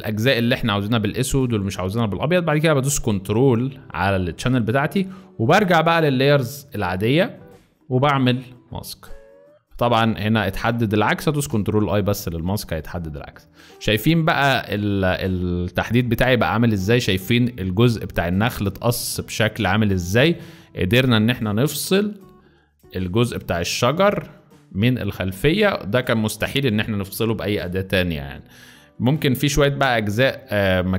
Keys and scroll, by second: 0.5 space, 11.4 ctrl+i, 12.8 z, 15.8 v, 17.8 z, 18.9 z, 19.6 space, 20.3 z, 24.9 z, 30.2 space.